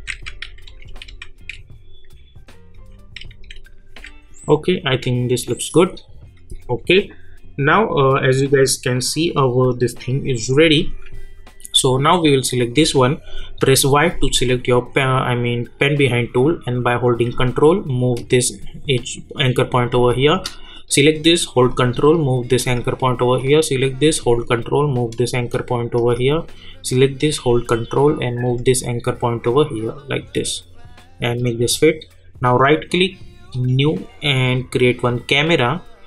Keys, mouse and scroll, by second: 0.4 Right, 4.8 click, 9.2 click, 11.2 alt+scroll up 1, 12.2 click, 13.6 y, 17.1-19.9 drag, 19.9 space, 20.1 click, 21.7-23.4 ctrl+drag, 24.5-29.4 ctrl+drag, 30.3 click, 32.5 right click, 33.5 click.